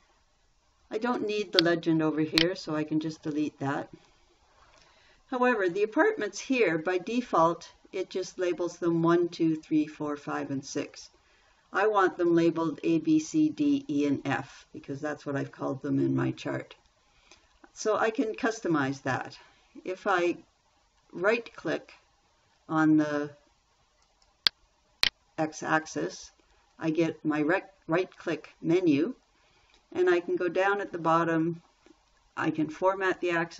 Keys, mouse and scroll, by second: 3.6 Delete.